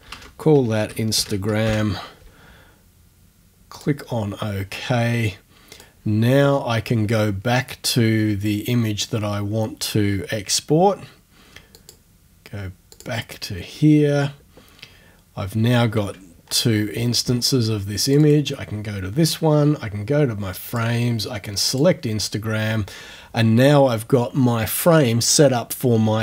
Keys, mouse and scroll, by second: 0.0-2.1 typing, 3.8 click, 5.7 click, 11.8 click, 12.9 click, 16.5-17.5 ctrl+scroll up 1, 18.1 ctrl+click, 20.7 click, 21.7 click.